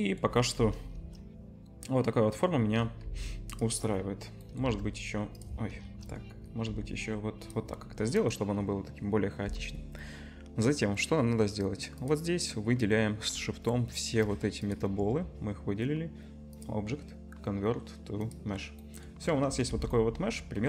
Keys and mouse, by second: 0.9 KP_0, 1.2-2.5 drag, 3.0 click, 3.0 g, 3.9-6.0 drag, 4.7 shift+d, 5.8 KP_0, 6.6 g, 12.0 click, 15.5-16.5 middle drag, 16.5-17.6 right drag, 17.6-19.9 drag, 19.7 Tab, 20.2 click, 20.3-20.6 drag.